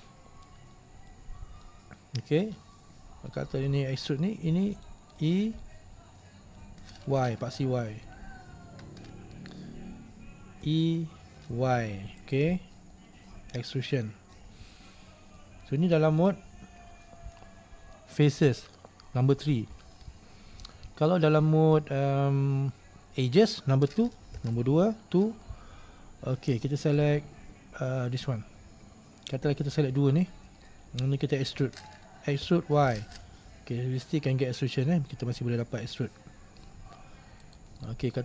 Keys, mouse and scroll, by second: 0.9-1.2 scroll down 1, 1.2-4.8 middle drag, 4.8 right click, 5.3-7.3 middle drag, 7.3 y, 10.7 e, 12.7-14.8 middle drag, 14.8 scroll down 1, 15.1-15.5 scroll up 1, 15.5 middle click, 16.3 right click, 17.5-24.5 middle drag, 24.5 2, 27.0 right click, 30.2 shift+right click, 30.9-32.5 middle drag, 32.5 e, 38.0-38.2 middle drag.